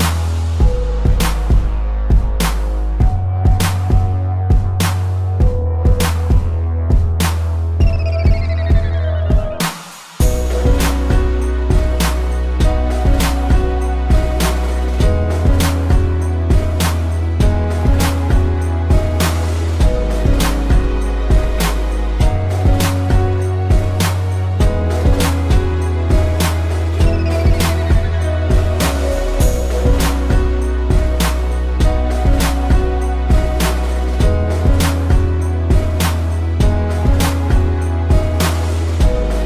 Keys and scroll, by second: 0.0 z, 1.2 p, 1.6 space, 3.3 ctrl+z, 5.4 space, 7.7 space, 10.5 ctrl+z, 11.1 ctrl+=, 11.2 space, 11.8 ctrl+z, 12.3 ctrl+z, 16.6 space, 17.3 space, 18.9 space, 20.3 space, 22.5 space, 23.7 space, 25.8 ctrl+=, 26.0 space, 27.3 space, 29.7 space, 31.1 ctrl+z, 32.4 space, 35.1 ctrl+-, 35.7 ctrl+-, 35.9 ctrl+=, 36.5 space, 38.4 Delete, 38.8 z, 39.3 a.